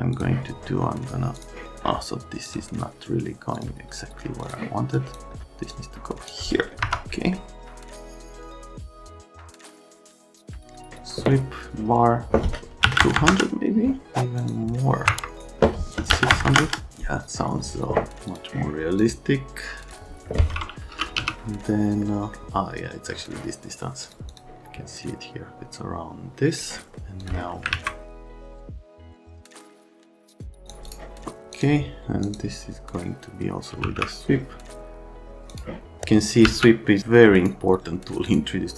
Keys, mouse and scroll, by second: 0.1 click, 1.4 click, 2.5 click, 3.5 click, 4.4 click, 5.0 click, 5.7 click, 6.8 F3, 7.5 click, 7.7 click, 7.9 click, 8.0 right click, 8.3 F3, 8.4 click, 8.6 F3, 9.0 click, 9.2 click, 9.6 click, 9.9 right click, 10.0 click, 10.1-10.9 typing, 10.2 click, 12.8 KP_1, 13.0 KP_0, 13.2 KP_0, 13.3 KP_Enter, 14.4 click, 15.1 Escape, 15.4 click, 16.1 KP_6, 16.3 KP_0, 16.5 KP_0, 16.6 KP_Enter, 19.0 right click, 19.8 click, 20.7-21.7 typing, 27.7 alt+q, 28.2 click, 28.5 click, 28.7 click, 28.9 click, 29.0 click, 29.1 right click, 29.5 click, 29.6 right click, 29.9 click, 30.2 BackSpace, 30.3 click, 30.4 click, 30.6 click, 30.8 right click, 31.5 click, 32.2 click, 33.5-34.3 typing, 35.5 click, 36.4 v, 37.4 right click, 38.2 click.